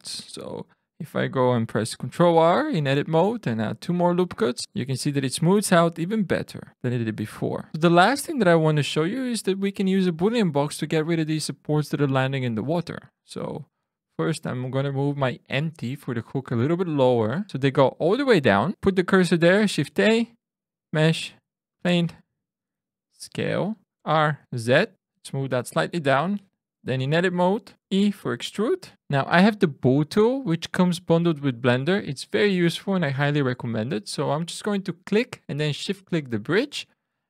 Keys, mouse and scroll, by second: 0.1 ctrl+e, 1.8 ctrl+r, 3.7 Escape, 4.1 Tab, 7.7 scroll up 2, 13.1 click, 16.7 click, 17.6 click, 19.6 shift+a, 22.9 s, 23.6 click, 23.9 r, 24.4 z, 24.9 click, 25.2 click, 26.7 Tab, 28.0 e, 28.9 Tab, 28.9 click, 30.3 click, 33.2 click, 36.1 shift+click.